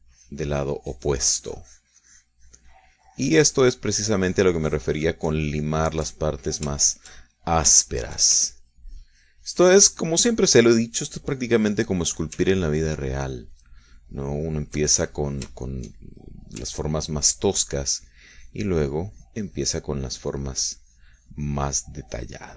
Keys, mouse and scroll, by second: 7.7 ctrl+shift+middle click, 7.9-9.7 ctrl+shift+middle drag, 9.7-12.9 ctrl+shift+drag, 13.0 ctrl+middle click, 13.8-16.0 ctrl+drag, 16.1-17.5 ctrl+middle drag, 17.5 click, 18.2-22.5 ctrl+drag.